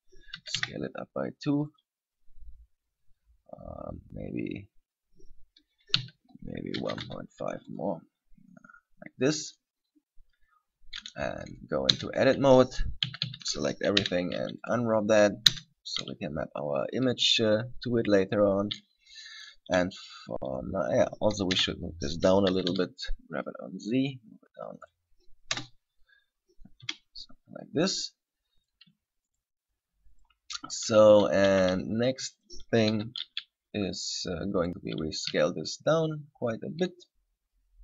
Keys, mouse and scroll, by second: 0.6 s, 2.0 click, 3.0 scroll down 1, 3.3 scroll up 2, 6.2 s, 8.0 click, 12.2 Tab, 13.3 a, 13.5 a, 14.2 u, 15.8 Tab, 16.8-17.3 scroll up 1, 19.6 right click, 21.0 right click, 21.7 KP_3, 22.6 g, 25.1 click, 25.7 KP_0, 27.0 KP_7, 27.7-28.2 scroll up 2, 28.2-28.6 scroll down 1, 28.8 right click, 29.6 shift+right click, 30.4 right click, 31.2 a, 31.7 b, 33.1 z, 34.1 shift+right click, 34.8 shift+right click, 35.6 s.